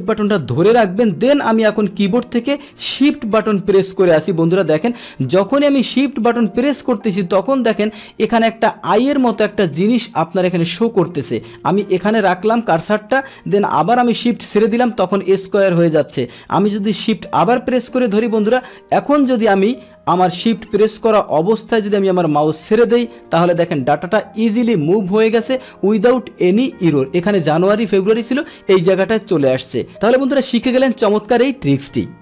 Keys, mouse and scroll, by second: 29.1 click.